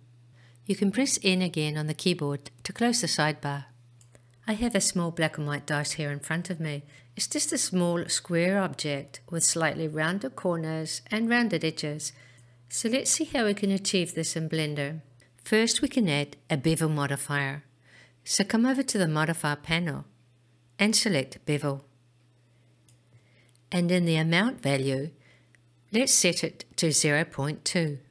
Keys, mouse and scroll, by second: 1.5 n, 3.1-4.4 scroll up 2, 4.7-6.8 shift+middle drag, 19.1 click, 22.3 click, 24.2-27.9 drag.